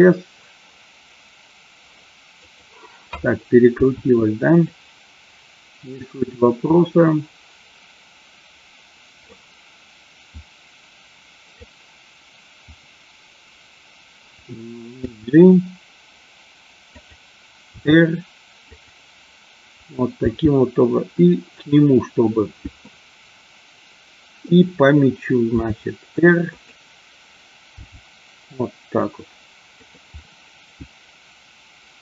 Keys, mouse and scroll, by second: 2.4 click, 3.7 s, 4.5 click, 6.8-9.3 drag, 10.3-11.7 drag, 15.0 g, 16.9 click, 17.7 r, 18.7 click, 20.2 g, 22.8-24.4 middle drag, 25.5 r, 26.5 click, 27.7 g, 29.7 click, 30.2-32.0 middle drag.